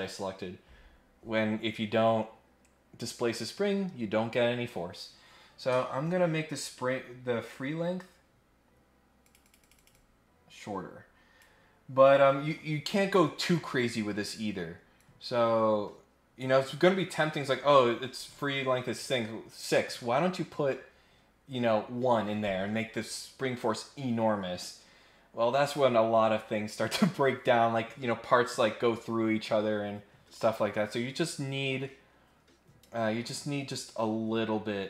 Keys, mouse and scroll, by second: 9.2 click, 9.4 click, 9.6 click, 9.7 click, 9.9-11.4 drag, 14.9-16.4 drag.